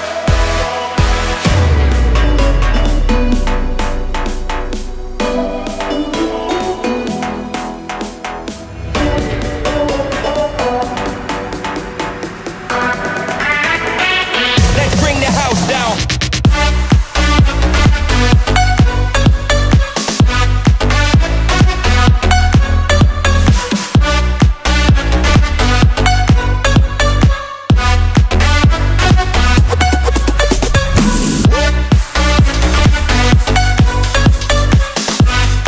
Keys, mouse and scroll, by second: 0.3 click, 1.4-2.1 drag, 6.1 click, 7.6 click, 10.4 click, 11.6 click, 14.0 click, 16.3 click, 18.7 shift+click, 20.4 shift+click, 22.6 shift+click, 26.9 click, 29.8 shift+click, 31.8 shift+click, 33.8 shift+click.